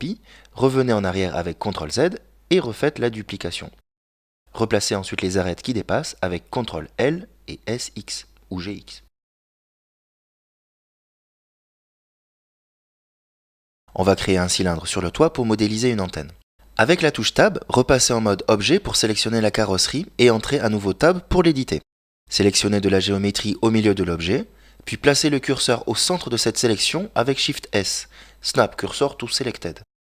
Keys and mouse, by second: 1.8 s, 5.5 right click, 6.4 ctrl+l, 7.6 s, 10.8 right click, 12.1 ctrl+l, 13.3 s, 19.0 Tab, 20.2 right click, 20.8 Tab, 21.4 middle click, 24.0 click, 24.4 click, 25.4 right click, 26.0 shift+right click, 27.6 shift+s.